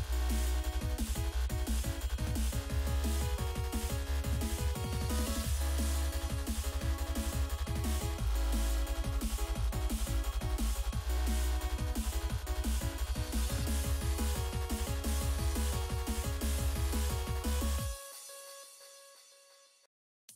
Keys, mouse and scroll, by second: 1.3 click, 1.4 double click, 4.5 click, 4.7 double click, 6.0 click, 6.9 click, 7.5 right click, 8.7 click, 9.7 click, 9.9 double click, 10.5 double click, 14.7 click, 15.6 click, 17.1 click, 17.1 click.